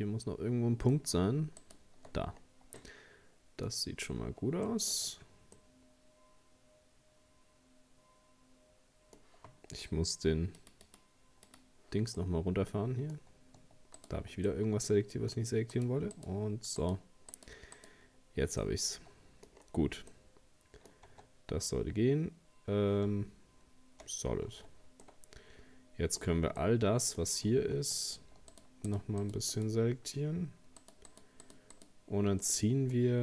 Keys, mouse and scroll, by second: 1.6 shift+right click, 2.4-2.8 scroll down 3, 2.8-4.0 middle drag, 4.0-4.5 scroll up 2, 4.7 shift+middle click, 5.0-5.5 shift+scroll up 2, 5.6-8.6 middle drag, 10.6-12.2 drag, 12.2-14.0 middle drag, 14.0 shift+right click, 14.5-15.7 middle drag, 15.7 shift+right click, 16.2 shift+right click, 16.8 shift+right click, 17.3 shift+right click, 17.8 shift+right click, 18.6 middle click, 19.5-20.1 scroll down 3, 20.1 middle click, 21.1 Tab, 23.1 z, 24.5 Tab, 25.0-28.5 middle drag, 28.5 shift+right click, 28.9 shift+right click, 29.2 shift+right click, 29.5 shift+right click, 30.8 shift+right click, 31.1 shift+right click, 31.4 shift+right click, 31.7 shift+right click, 32.4-33.2 middle drag.